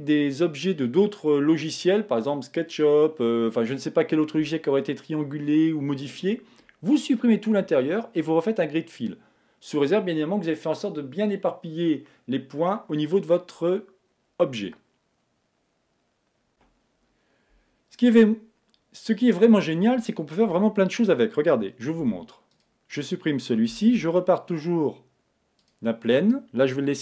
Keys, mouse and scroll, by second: 20.4 Tab, 22.0 x, 23.9 shift+a.